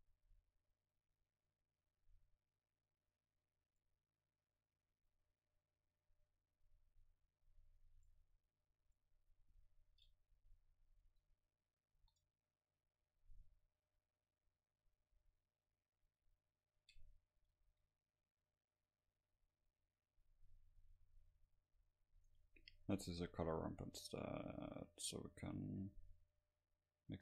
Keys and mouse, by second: 0.0-1.2 right drag, 0.9 middle click, 2.3-4.1 drag, 5.3-7.5 drag, 7.6-10.5 drag, 11.1 a, 11.5 a, 12.0 ctrl+s, 15.9-17.5 middle drag, 19.2 shift+a, 22.3-26.8 drag, 27.1 click.